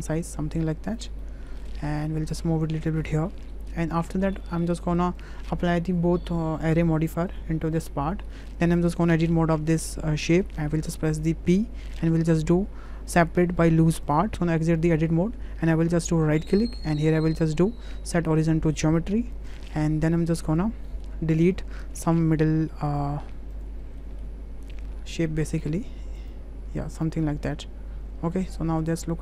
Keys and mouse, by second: 1.2 middle drag, 1.6 middle drag, 2.4 click, 3.4 middle click, 4.1 shift+middle click, 4.5 middle click, 4.8 shift+middle click, 6.5 click, 7.3-7.9 drag, 8.3 shift+middle drag, 9.6 Tab, 11.5 p, 15.1 Tab, 16.3-18.2 drag, 20.2 click, 20.9 click, 21.4 click, 22.3 Delete, 22.9 click, 23.5 Delete, 23.5 click, 23.8 Delete, 24.0 drag, 24.7 click, 25.0 Delete, 25.5 drag, 25.7 Delete, 26.3 click, 26.6 Delete, 27.3 Delete, 27.5-28.3 drag.